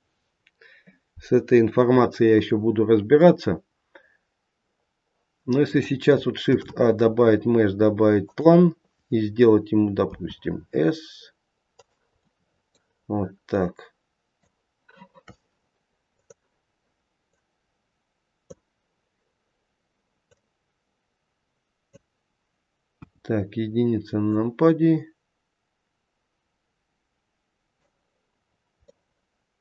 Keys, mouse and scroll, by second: 3.1 middle click, 6.3 shift+a, 10.0 s, 13.1 middle click, 13.4 middle click, 16.1 click, 17.2 click, 20.2 click, 22.9 KP_1, 24.2 click, 28.4-28.8 scroll up 2, 28.8 middle click.